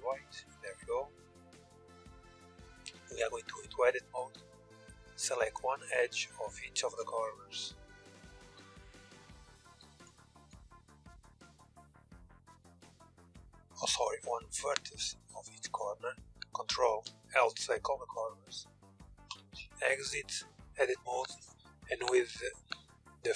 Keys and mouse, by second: 2.3 Tab, 3.0 middle click, 3.8 a, 8.0 ctrl+z, 8.7 KP_1, 9.6 ctrl+KP_1, 13.6-18.9 right drag, 16.6 ctrl+l, 18.9 Tab, 21.9-23.3 drag.